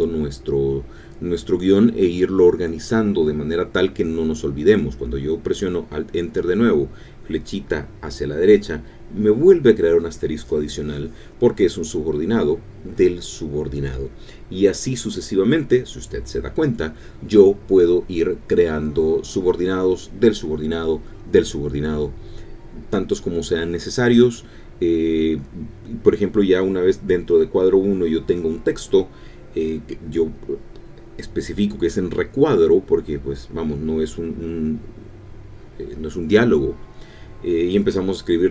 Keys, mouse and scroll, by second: 1.1 alt+Return, 4.4 alt+Right, 11.6-13.3 typing, 14.6 alt+Return, 15.7-17.7 typing, 20.1 Return, 24.7-25.9 typing, 27.6-30.3 typing, 32.5-38.5 typing.